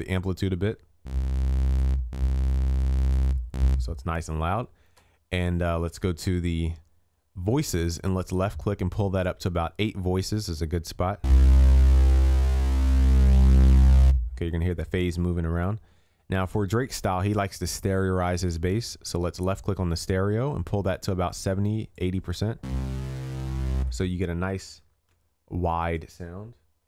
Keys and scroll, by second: 25.1 ctrl+s.